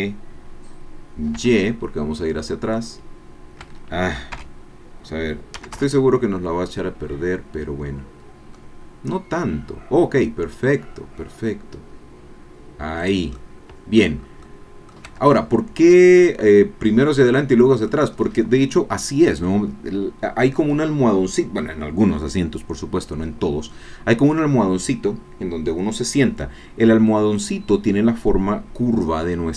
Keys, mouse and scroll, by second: 1.3 y, 3.6 Escape, 4.3 o, 5.5 g, 5.8 y, 7.0-7.6 scroll up 2, 8.5-9.0 scroll up 3, 13.0 click, 13.3 click, 14.1 middle click, 14.2 scroll down 1, 14.4 click, 15.3 Tab, 15.3 middle click, 15.3-18.0 drag, 18.2 scroll up 2, 22.9 middle click.